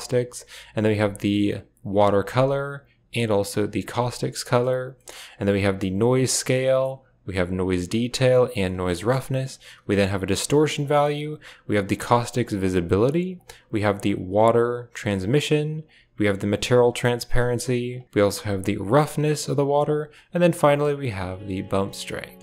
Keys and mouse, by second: 0.0 click, 2.4 click, 4.9 middle click, 5.2 click, 6.5 click, 7.8 click, 8.9 middle drag, 9.3-10.7 drag, 11.3-12.8 drag, 13.3-15.0 drag, 15.7-17.8 drag, 18.0-19.5 drag, 20.1-22.0 drag.